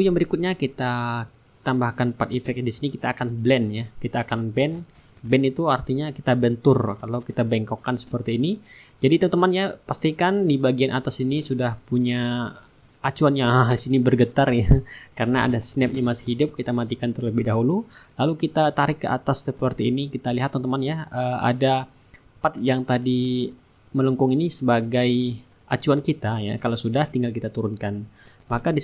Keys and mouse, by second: 0.1 click, 2.5 click, 5.6 click, 7.9-9.1 middle drag, 11.3-14.8 drag, 15.9 click, 17.9-24.2 drag, 26.1-28.8 drag.